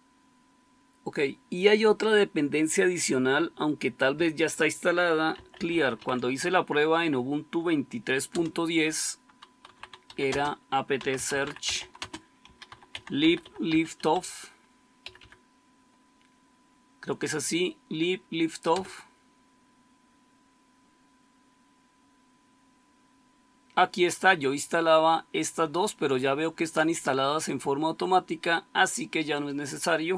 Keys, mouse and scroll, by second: 5.0-6.4 typing, 8.2 Return, 9.3-15.8 typing, 18.7 Return.